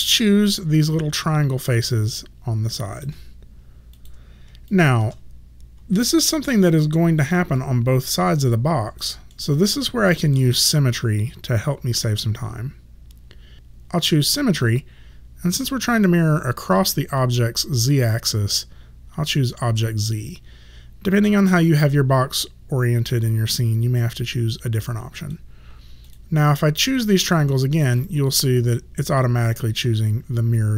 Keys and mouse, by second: 0.2 right click, 4.0 click, 4.8 shift+click, 6.0 alt+click, 7.0 alt+middle click, 7.6 alt+click, 9.4 alt+middle click, 13.5 click, 25.3 click, 27.8 shift+click, 28.3 alt+click.